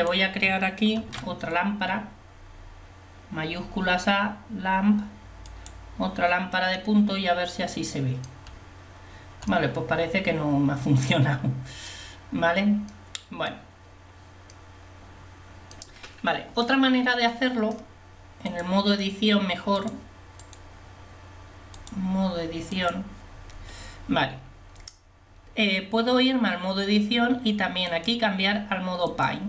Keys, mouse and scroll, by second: 1.1 shift+a, 6.8-8.8 middle drag, 13.0-14.8 middle drag, 18.6-20.3 drag, 20.4 right click.